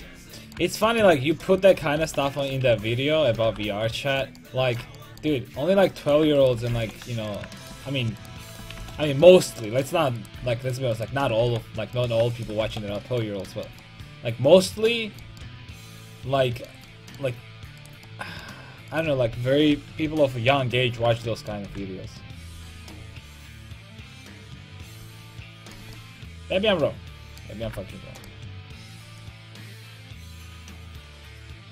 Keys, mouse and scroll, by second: 2.0 alt+m, 2.7 ctrl+x, 3.2 a, 3.5 ctrl+t, 3.6 a, 6.8 alt+m, 8.8 alt+m, 9.3 middle click, 10.4 g, 11.4 alt+m, 12.6 alt+m, 17.8 right click, 19.7 KP_5, 20.0 KP_3, 21.7 g, 27.6 g.